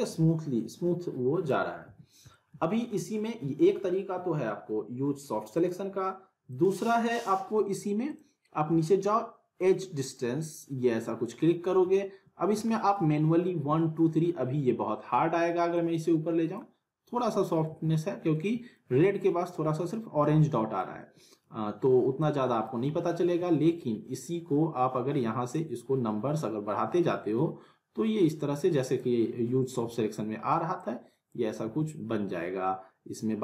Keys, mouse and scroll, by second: 1.9 ctrl+z, 2.3-2.9 alt+middle click, 2.9 scroll up 1, 3.1-3.8 alt+middle click, 3.8 scroll down 1, 5.5 click, 11.6 scroll up 1, 11.9-13.0 alt+middle click, 15.7-16.7 drag, 17.7 ctrl+z, 18.3-19.0 alt+middle click, 18.9 scroll up 1, 19.8-20.1 scroll down 1, 20.2-20.8 alt+middle drag, 22.2-22.8 click, 23.2 z, 25.5-27.1 drag, 29.8 ctrl+z, 30.8-31.4 click, 31.6 ctrl+z.